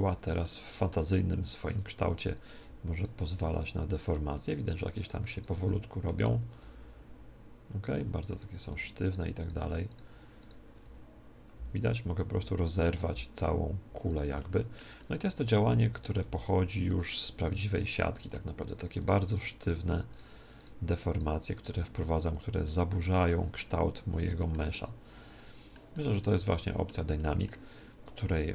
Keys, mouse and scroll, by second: 0.1 middle click, 0.4-1.7 middle drag, 1.7 click, 2.9 right click, 4.4-6.0 middle drag, 4.9-7.9 right drag, 6.5 g, 7.3 g, 7.9 click, 8.3 middle click, 8.5-12.2 right drag, 10.8 g, 11.4 g, 14.1 click, 14.3-16.6 middle drag, 15.9 right click, 16.2 g, 16.9 click, 16.9 middle click, 18.1-23.1 right drag, 21.8 g, 22.3 click, 22.6 middle click, 23.1 middle click, 23.3 middle click, 23.8-28.5 middle drag, 27.9 Tab.